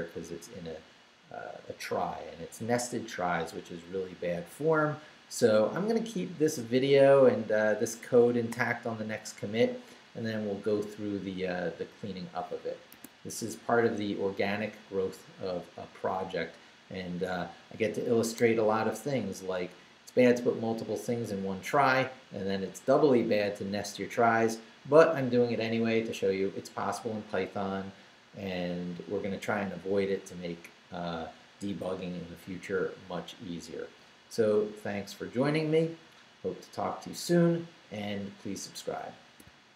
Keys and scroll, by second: 12.9 q.